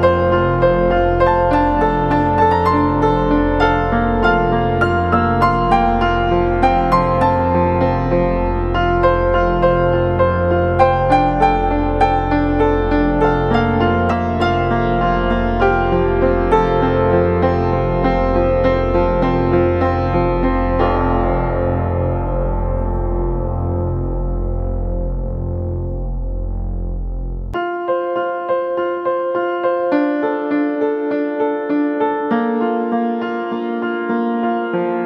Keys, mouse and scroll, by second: 10.9 double click, 31.8 ctrl+click, 32.7 right click.